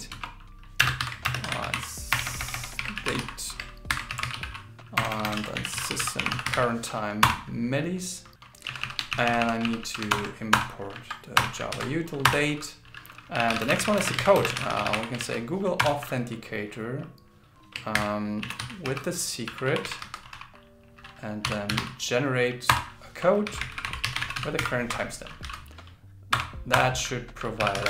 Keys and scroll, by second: 1.0 shift+0, 1.4 shift+t, 2.8 shift+d, 3.9 shift+8, 5.4 shift+s, 9.1 alt+Left, 10.1 alt+Return, 11.7 super+Right, 14.5 shift+g, 15.2 shift+a, 18.0 shift+8.